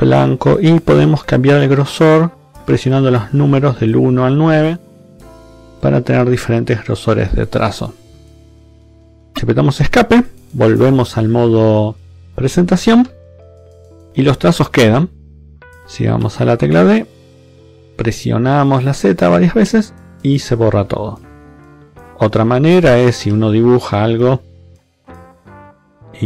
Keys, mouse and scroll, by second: 1.0 1, 1.8 click, 2.5 2, 2.9 click, 3.6-6.7 typing, 3.9 click, 4.8 click, 5.8 click, 6.8 click, 10.0 Escape, 12.9 Left, 13.4 Right, 16.1 d, 18.4 z, 21.2 Escape, 21.9 Left, 23.2 d, 23.4 click, 24.5 click, 25.3 b, 25.7 click.